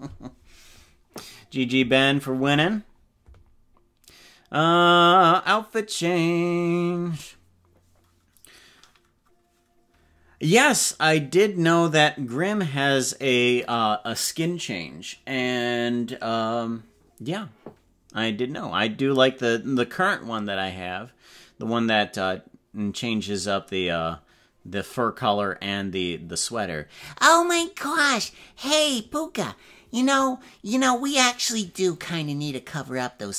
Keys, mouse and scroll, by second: 0.0 space.